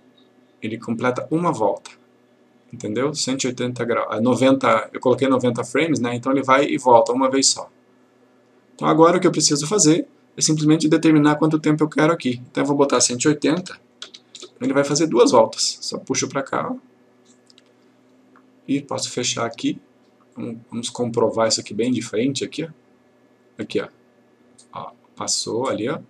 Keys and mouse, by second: 12.6 click, 13.7 typing, 15.2 click.